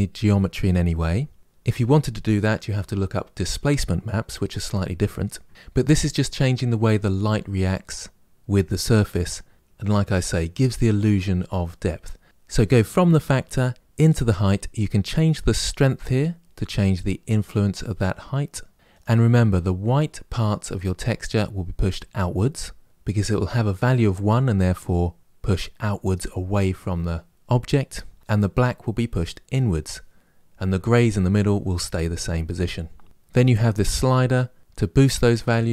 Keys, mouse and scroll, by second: 15.8-18.5 drag, 33.3-34.6 drag.